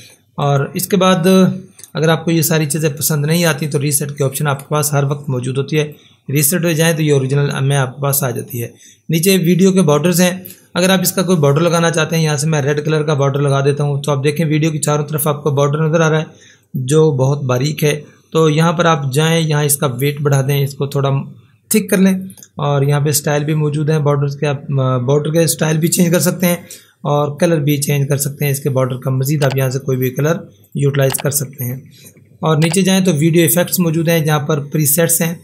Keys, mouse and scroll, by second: 0.5 click, 4.6 click, 9.5 click, 13.2 click, 16.7 click, 22.2 click, 30.7 click, 33.4 click.